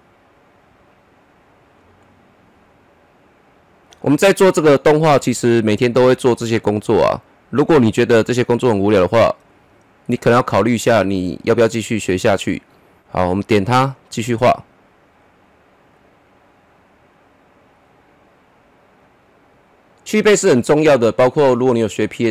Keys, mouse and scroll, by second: 4.2-5.9 middle drag, 5.9-10.7 drag, 10.7-13.0 middle drag, 13.0 ctrl+z, 13.9-22.3 drag.